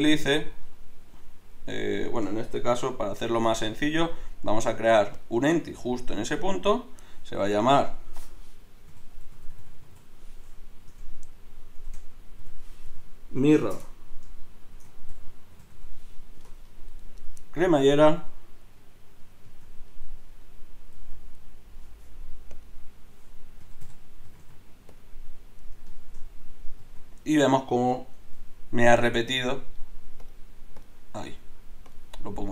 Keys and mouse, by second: 1.1 Escape, 3.3 shift+a, 7.5-9.6 drag, 9.6 r, 18.2-19.6 drag, 19.5 z, 20.9 z, 24.4 r, 26.8 z, 27.7 z, 28.2 KP_Divide.